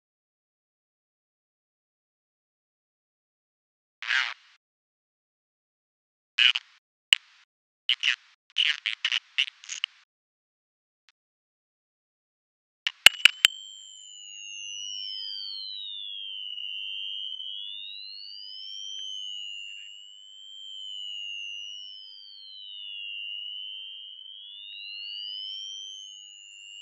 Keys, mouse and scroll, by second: 3.6 click, 5.0 click, 5.7 click.